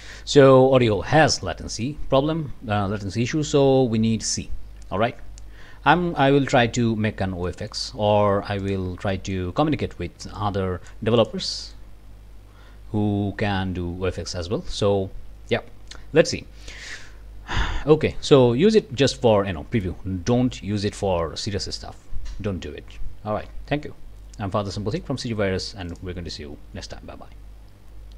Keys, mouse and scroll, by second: 1.4 click, 6.9 scroll up 1, 7.5 click, 7.9-8.6 scroll up 1, 8.6 click, 9.1 click, 10.4 click, 11.2 click, 11.6 click, 11.9-24.2 scroll up 1, 25.0 click, 25.9 click.